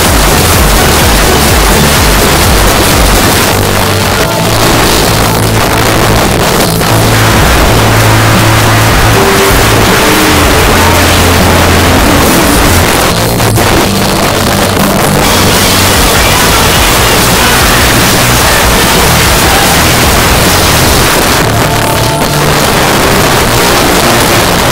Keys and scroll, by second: 3.3 Page_Down, 12.8 Page_Down, 21.1 Page_Down.